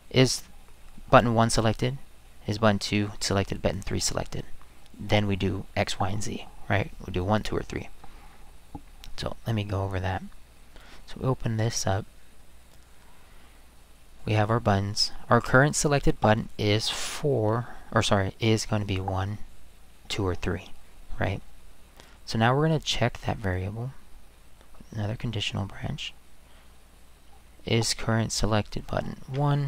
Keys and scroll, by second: 29.3 1.